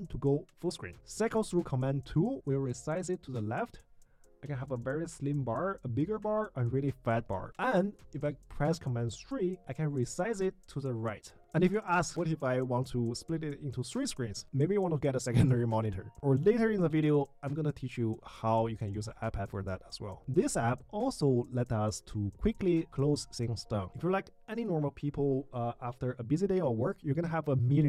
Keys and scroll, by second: 0.0 super+1, 0.8 super+2, 7.2 super+2, 7.6 super+3, 20.2 super+w, 21.8 super+q, 24.5 super+q, 26.6 super+q.